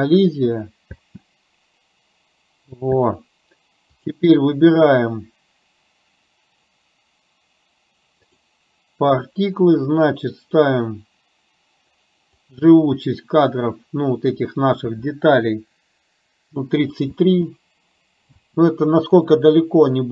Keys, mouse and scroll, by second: 1.1 space, 2.9 space, 3.9 click, 8.3 click, 12.6-16.7 drag, 17.2 space, 18.3 space.